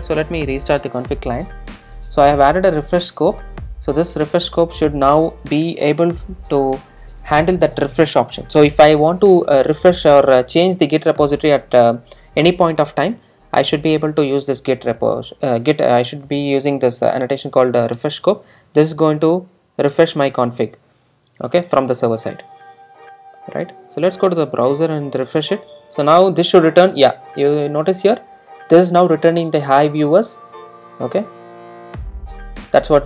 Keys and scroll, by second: 0.5 super+r.